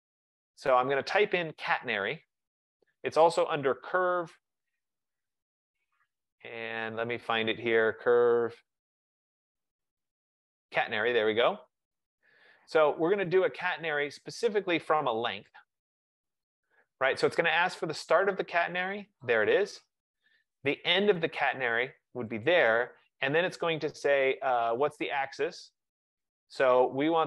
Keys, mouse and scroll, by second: 4.0 Escape, 5.5 click, 15.6 click, 19.5 click, 22.6 click, 27.0 click.